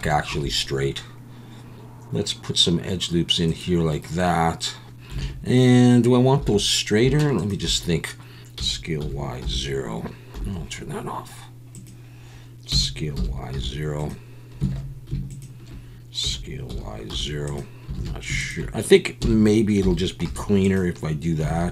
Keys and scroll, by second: 0.3 ctrl+r, 5.2 alt+a, 6.4 2, 8.5 s, 9.0 y, 9.4 0, 10.4 Escape, 12.7 s, 13.1 y, 13.5 0, 14.7 alt+a, 16.2 s, 16.7 y, 17.1 0, 17.9 alt+a, 19.2 s, 19.8 y, 20.2 0, 21.5 alt+a.